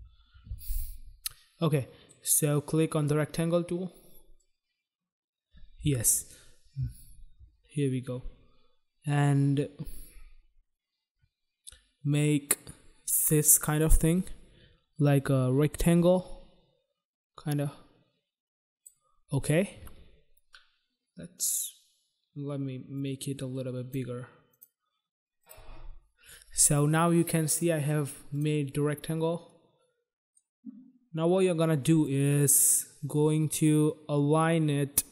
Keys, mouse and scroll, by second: 1.6 click, 2.8 click, 3.0 click, 4.3 click, 22.8 click, 24.4 click, 25.4 click, 25.4 click, 28.2 click, 29.4 click, 32.0 click.